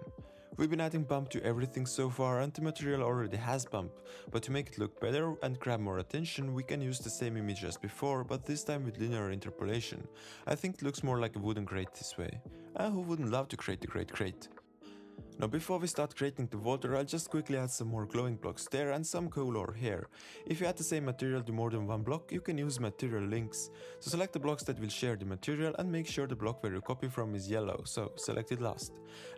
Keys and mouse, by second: 1.4-3.2 drag, 3.9 middle click, 4.5 middle click, 5.7 drag, 6.1-7.7 drag, 7.0 shift+d, 8.0 middle click, 8.4 click, 9.8 middle click, 10.9-11.7 drag, 12.6 super+s, 12.9 g, 14.8 click, 17.9 click, 17.9 shift+click, 18.2 shift+click, 18.3 z, 18.6 click, 18.7 z, 19.3 click, 19.6 shift+middle click, 19.6 shift+middle click, 19.8 shift+middle click, 20.3 click, 20.4 click, 20.6 click, 21.1 click, 21.3 click, 21.4 click, 21.6 click, 24.7 shift+click, 25.8 shift+click, 26.3 shift+click, 26.6 shift+click, 27.7 shift+click.